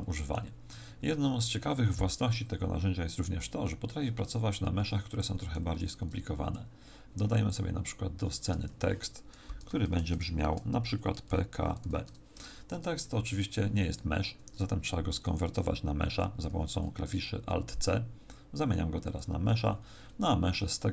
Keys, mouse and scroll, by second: 0.6 Tab, 4.7 x, 5.7 shift+a, 8.5 Tab, 9.4-11.8 typing, 12.7 Tab, 16.4 alt+c, 19.6-20.6 scroll up 8.